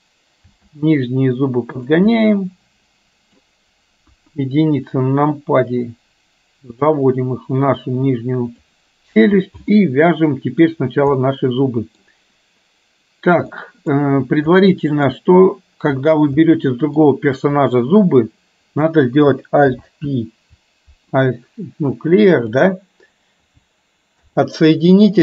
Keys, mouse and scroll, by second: 0.6 g, 2.1-3.4 middle drag, 4.1 KP_1, 5.7-8.9 drag, 9.7-10.7 middle drag, 11.2-12.1 middle drag, 13.6-14.0 middle drag, 14.5 middle click, 16.6 middle click, 17.6 click, 19.6 alt+p, 22.5 click, 24.1 alt+p.